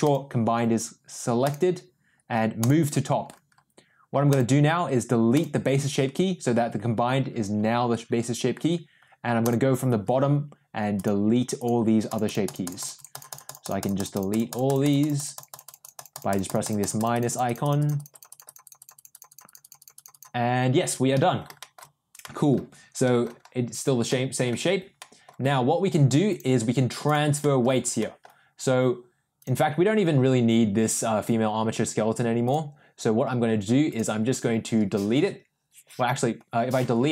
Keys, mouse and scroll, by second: 0.0 click, 1.4-2.7 drag, 4.3 click, 5.3 drag, 9.4 click, 10.9 click, 11.5 click, 12.0 click, 15.1 click, 21.1 middle drag, 21.5 shift+middle click, 22.1 middle drag, 23.0 middle drag, 24.0-24.4 middle drag, 24.9 middle drag, 27.0 click, 27.3 middle click, 27.9 middle drag, 32.4 click, 33.8 click.